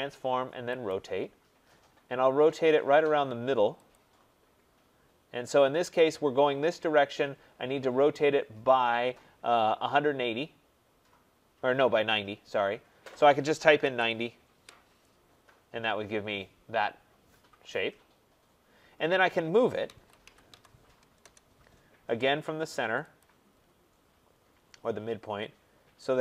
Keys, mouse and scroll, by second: 0.8 click, 1.5-3.7 scroll, 3.9 click, 13.8-14.3 typing, 15.6-16.3 typing, 15.7 middle click, 15.8-18.9 scroll, 18.9 scroll, 19.6-21.1 typing, 23.2 click, 23.4-24.3 scroll, 24.3 scroll.